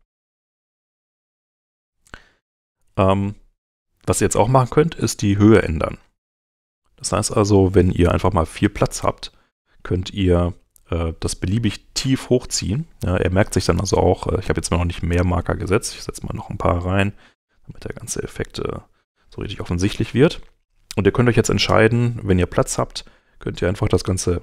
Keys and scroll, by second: 0.3-1.5 typing, 16.0 m.